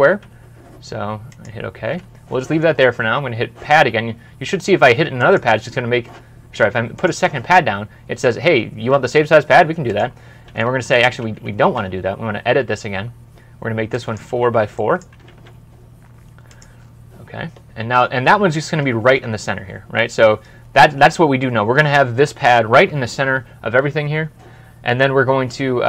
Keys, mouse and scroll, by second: 10.7 Escape, 11.5 e, 14.2-15.0 typing, 19.0 alt+Tab.